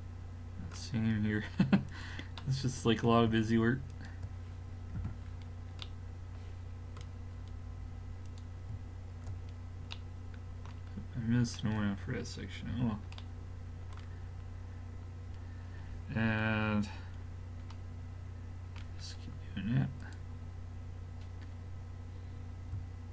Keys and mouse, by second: 2.4-3.8 drag, 3.8 middle click, 3.9-5.4 drag, 5.0 f, 8.3-9.3 drag, 9.4 click, 12.7 a, 20.0-23.1 drag.